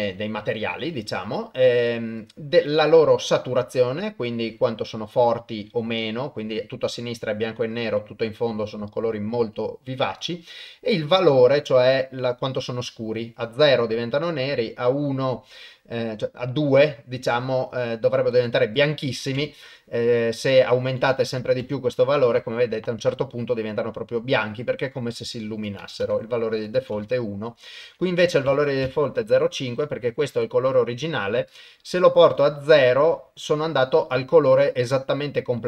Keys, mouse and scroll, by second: 2.3-10.2 drag, 11.1-18.2 drag, 18.7 click, 20.6-21.7 drag, 21.3 KP_0, 25.6 click, 26.6 click, 27.6-28.9 drag, 31.6-34.7 drag.